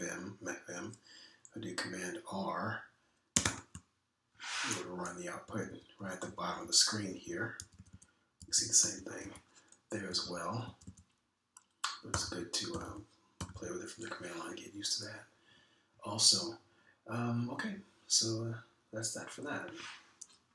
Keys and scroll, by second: 4.4 super+r, 6.5 Down, 6.7 Down, 7.2 Down, 7.5 Down, 7.6 Down, 8.0 Up, 8.2 Up, 8.5 Down, 9.4 Up, 9.8 Down, 11.1 Up, 11.2 Up, 11.6 Down, 11.8 Down, 13.0-14.5 typing.